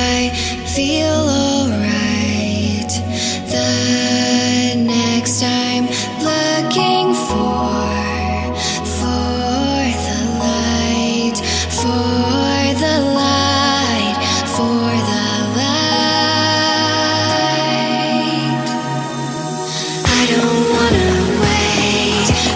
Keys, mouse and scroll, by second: 0.1 click, 1.1 middle click, 1.9-3.8 drag, 4.1 middle click, 4.7 click, 5.5 shift+a, 10.6-12.5 drag, 12.7-15.1 drag, 17.6-19.9 drag, 20.1 click, 20.6-22.5 drag.